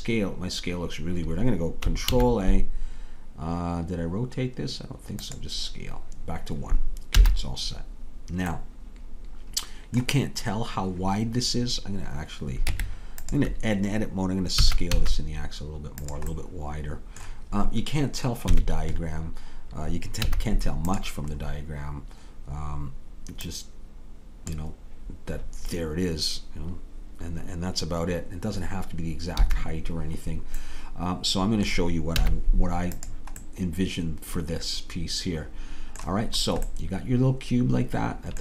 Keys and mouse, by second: 2.1 ctrl+a, 7.2 n, 8.6 middle click, 12.7 Tab, 14.6 s, 18.6 KP_3, 20.3 z, 23.5-24.6 drag, 29.4 a, 32.2 z, 33.5 middle click, 34.4 middle click, 34.6-35.8 middle drag, 36.4 middle click, 36.9 middle click, 37.0 right click, 37.1-38.4 middle drag.